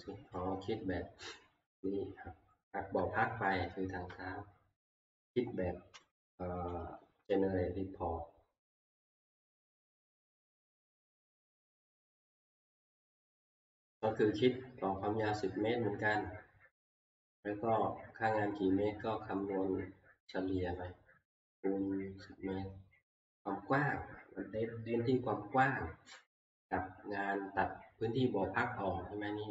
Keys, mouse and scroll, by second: 1.8-3.1 scroll, 4.1-5.3 scroll, 6.7 alt+F2, 12.9-14.9 scroll, 15.0 middle click, 15.0 middle click, 15.7 middle click, 16.9 middle click, 20.6 click, 20.9 scroll, 27.4 scroll.